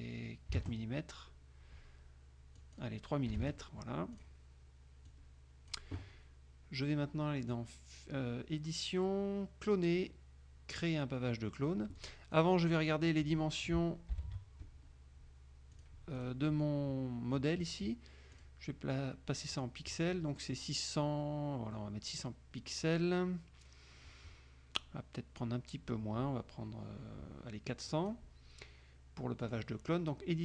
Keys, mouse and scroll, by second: 0.6 KP_4, 1.1 KP_Enter, 2.7 click, 3.4 KP_3, 4.3 click, 5.2 click, 7.5 click, 12.1 click, 12.5 click, 12.9 click, 14.3 ctrl+shift+l, 15.9 click, 16.3 click, 18.5 click, 19.7 click, 21.9-23.2 middle drag, 28.0 click, 29.5 click.